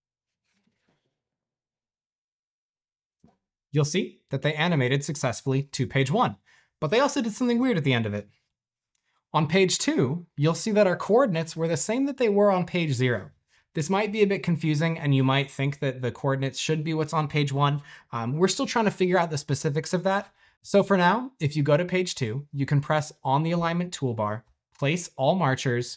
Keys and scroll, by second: 4.4 space, 8.5 typing, 9.5 typing, 10.5 typing.